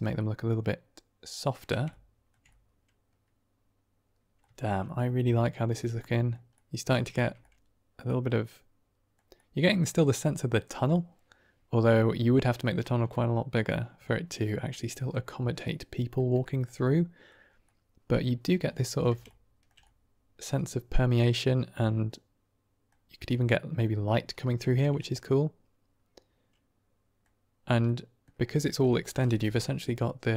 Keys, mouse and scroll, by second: 0.1-1.5 middle drag, 1.8-2.2 ctrl+middle drag, 2.4 middle click, 2.5-3.1 drag, 3.1-3.6 middle drag, 3.6-4.2 drag, 4.2 middle click, 4.5 shift+middle drag, 4.7 middle drag, 5.6 click, 5.9 drag, 6.1 middle click, 6.4 middle drag, 6.6 drag, 7.0 shift+drag, 7.4 drag, 7.6-7.9 middle drag, 7.9 click, 8.2-9.0 middle drag, 9.3-9.7 middle drag, 10.8-12.1 middle drag, 13.0-13.6 middle drag, 14.0 shift+middle drag, 14.6 middle click, 15.5-16.1 middle drag, 16.3 shift+middle click, 16.7-17.2 middle drag, 17.5-18.2 middle drag, 18.6 shift+middle drag, 19.2-19.6 ctrl+middle drag, 19.7-20.5 middle drag, 21.2-22.8 middle drag, 23.2-23.7 middle drag, 24.6 shift+middle drag, 24.9-27.1 middle drag, 27.8-28.1 middle drag, 28.6 shift+middle drag.